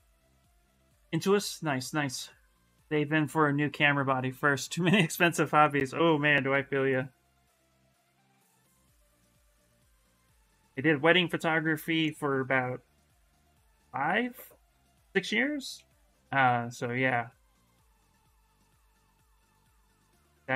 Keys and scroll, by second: 6.8 s, 9.3-10.8 typing, 14.5 s, 15.5 ctrl+z, 15.8 space.